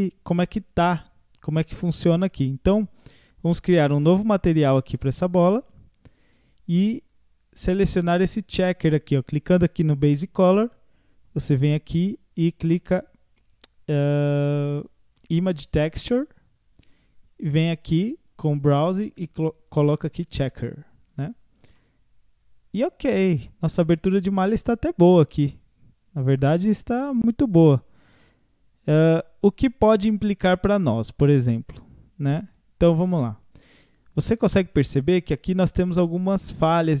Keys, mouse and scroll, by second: 4.8-7.8 drag, 10.0-13.0 drag, 18.3-21.8 drag, 21.8-24.8 middle drag, 32.5 Tab, 33.1-36.1 middle drag, 36.9 scroll up 1.